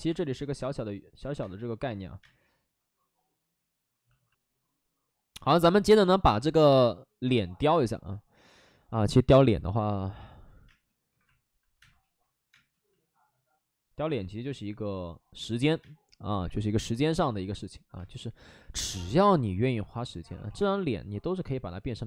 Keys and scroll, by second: 0.0 3, 1.3 space, 2.1 space, 10.6-12.4 typing, 15.7 space, 16.1 3, 17.9 space, 20.2 ctrl+z, 21.0 1.